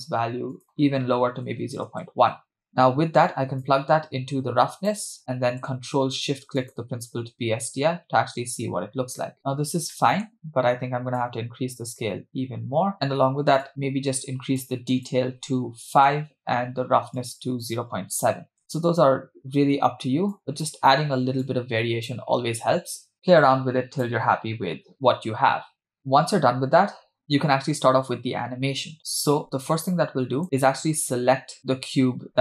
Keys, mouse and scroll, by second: 2.7-3.6 scroll down 2, 3.6 click, 3.9-5.0 drag, 5.3 middle click, 6.2 ctrl+click, 6.9 ctrl+shift+click, 9.5-9.9 scroll up 2, 9.9 middle click, 11.2-12.9 drag, 12.9-13.6 scroll up 1, 13.6 scroll up 2, 13.6-14.7 drag, 14.9-16.0 drag, 17.2 click, 17.6 click, 20.3 click, 21.5 click, 23.0-24.1 drag, 26.0-26.6 scroll down 1, 29.8 click, 31.7 KP_0.